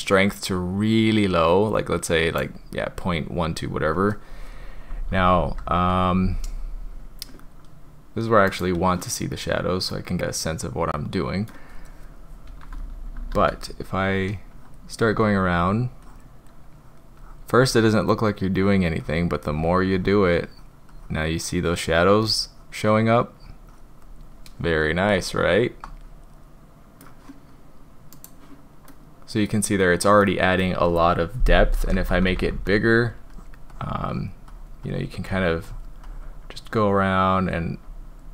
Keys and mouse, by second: 5.0-5.8 typing, 8.4 click, 9.8-11.5 drag, 12.5-13.4 typing, 14.1 drag, 14.6 drag, 15.1 drag, 15.5 drag, 16.1 drag, 16.8 drag, 17.2 drag, 17.6 drag, 18.1 drag, 18.6 drag, 19.1 drag, 19.5 drag, 20.0 drag, 20.5 drag, 20.9-21.8 drag, 22.2-22.8 drag, 23.4 click, 23.7 drag, 25.3-27.1 middle drag, 28.2 click, 28.9-29.5 drag, 30.3 click, 31.9-32.6 typing, 32.8-33.1 drag, 33.4 drag, 33.7 drag, 34.1 drag, 34.5 drag, 34.9 drag, 35.3 click, 35.7 drag, 36.1 drag, 36.7-37.6 drag, 37.9-38.2 drag.